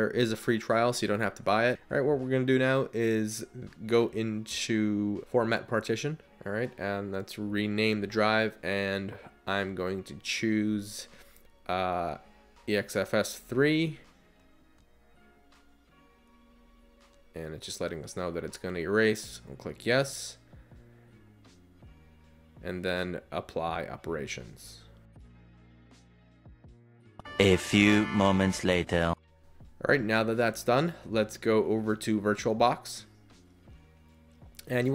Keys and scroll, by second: 9.3-10.9 typing.